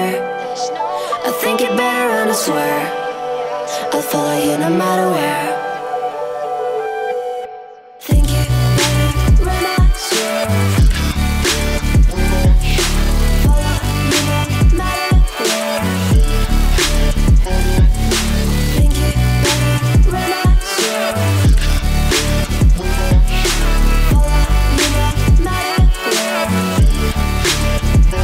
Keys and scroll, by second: 15.3 Right.